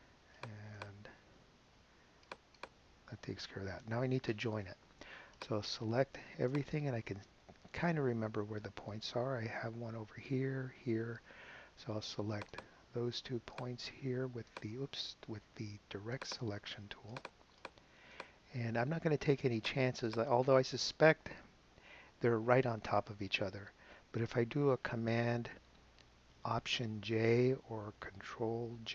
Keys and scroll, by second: 1.0 BackSpace, 2.7 BackSpace.